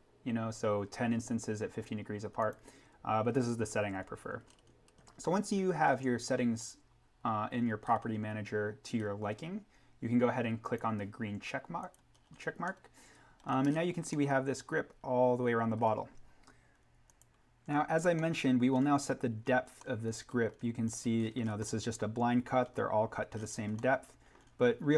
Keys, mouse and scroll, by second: 4.5 scroll up 1, 5.7-7.0 scroll, 10.7 click, 12.2-12.7 scroll down 1, 12.7 middle click, 12.8 scroll, 14.1 middle click, 14.4 scroll, 17.1 click, 17.6-18.2 scroll down 1, 18.2-19.7 middle drag, 19.7 scroll down 1, 19.7 middle click, 19.9-20.4 scroll, 20.8 click, 21.1-21.9 scroll up 1, 21.9-22.4 scroll, 23.7 middle click, 24.0 scroll.